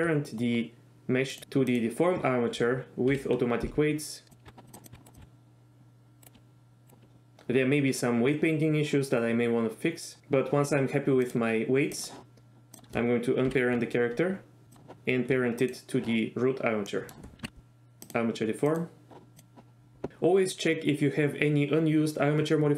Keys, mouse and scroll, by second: 1.4 ctrl+shift+z, 1.9 shift+click, 3.3 ctrl+p, 4.5 Tab, 4.7 click, 4.9 r, 5.1 click, 5.2 r, 6.2 right click, 6.3 r, 11.4-12.2 drag, 12.8 click, 13.6 alt+p, 17.0 middle click, 17.4 ctrl+p.